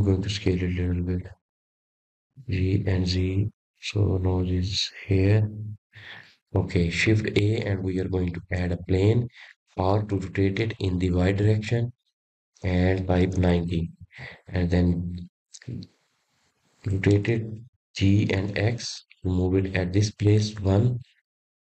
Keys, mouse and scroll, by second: 2.1-3.0 scroll up 3, 3.0 click, 4.0 s, 6.3 g, 9.8 click, 10.1-11.2 scroll down 4, 11.2 shift+a, 14.0 r, 18.2 scroll up 1, 18.7-20.1 scroll down 2, 20.1-20.5 scroll down 2, 20.5-21.7 middle drag.